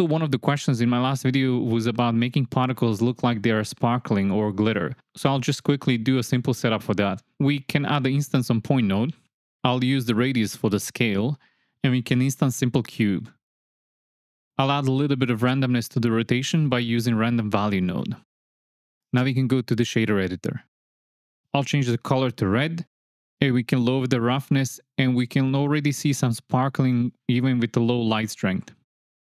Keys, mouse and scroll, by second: 0.5 click, 1.6-2.9 scroll, 3.6-5.0 drag, 7.6 shift+a, 9.8 click, 12.2 click, 12.9 click, 13.5 shift+x, 13.6 shift+a, 14.6-15.4 drag, 15.8-16.2 drag, 19.1 click, 20.2 space, 20.6 click, 21.2 click, 21.8 click, 24.1 click, 24.6 click, 28.5 shift+a.